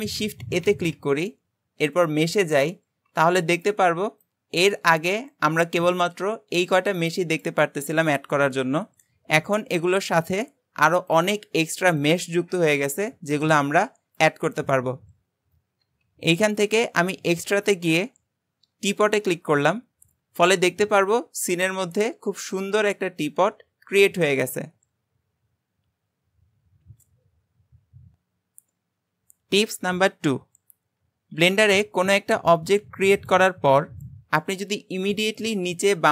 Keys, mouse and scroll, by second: 0.7 shift+a, 20.2-20.5 scroll down 1, 20.5-23.5 middle drag, 31.4 shift+a.